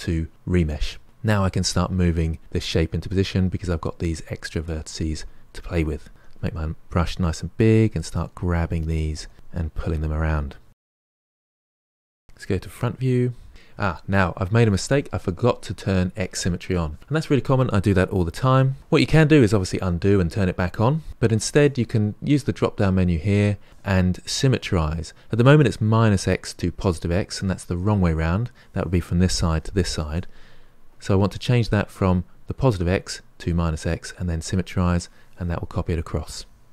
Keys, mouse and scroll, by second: 1.3-3.8 drag, 3.8 f, 4.0-7.1 drag, 7.1 f, 7.3-9.6 drag, 9.6 f, 9.8-11.0 drag, 11.0 f, 11.3 click, 11.5 f, 11.7-12.7 drag, 12.7 KP_1, 22.4-25.3 drag, 30.9-33.9 drag.